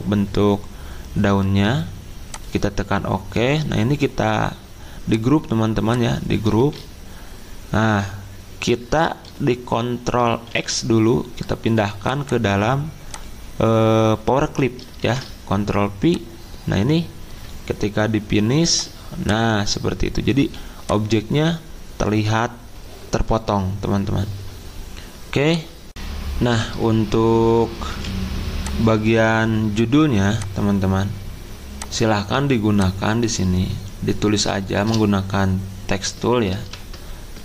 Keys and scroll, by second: 6.6 ctrl+z, 10.4 ctrl+x, 15.0 ctrl+v, 20.3 z, 25.9 ctrl+v, 27.9 z, 36.6 ctrl+v.